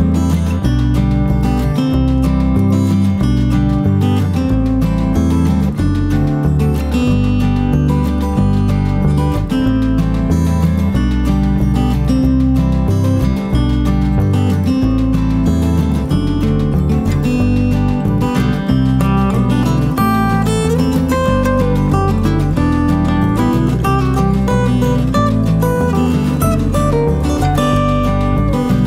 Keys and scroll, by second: 3.4 F1, 3.8-4.2 typing, 7.1 shift+F6, 11.8 F1, 14.7 -, 18.4 -, 19.0 space, 20.0 -, 26.2-26.8 typing.